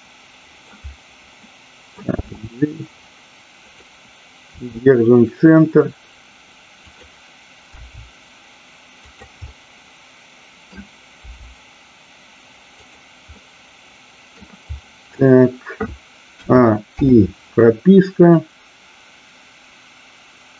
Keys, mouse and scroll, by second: 1.4 middle click, 3.6 click, 3.6 g, 6.8 click, 9.0 click, 9.4-10.7 middle drag, 11.2 g, 12.8 click, 13.4-14.4 middle drag, 18.3-20.5 drag.